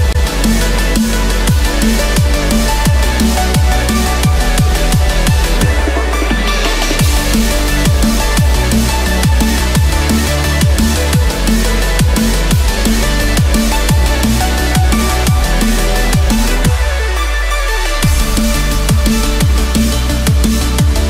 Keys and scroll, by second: 13.9 ctrl+z, 18.9 ctrl+=.